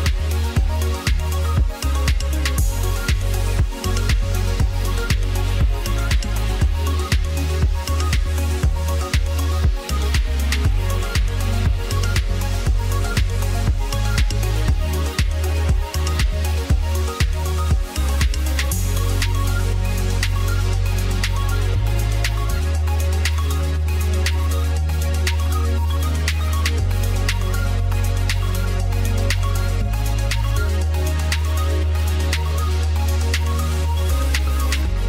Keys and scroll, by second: 3.2 ctrl+g, 16.0 ctrl+a.